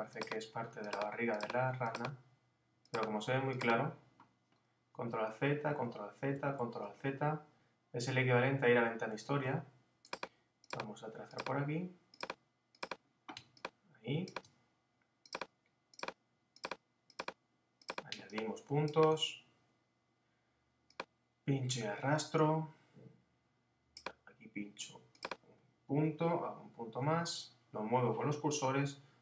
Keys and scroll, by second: 5.1 alt+super+z, 9.3 alt+super+z, 26.3 Down.